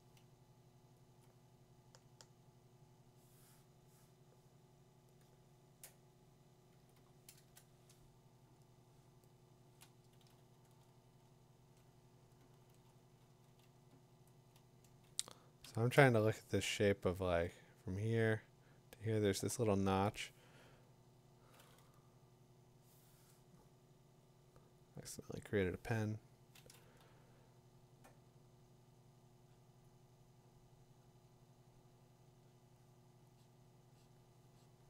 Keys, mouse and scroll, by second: 0.8 ], 1.2 click, 1.9 -, 5.6-8.4 drag, 6.8 6, 7.0 6, 7.3 Return, 8.3 Return, 9.5-12.8 drag, 11.2 o, 12.4 o, 13.9-16.7 typing, 14.9-18.7 drag, 24.0 click, 24.4 click, 24.9 click, 25.5 click.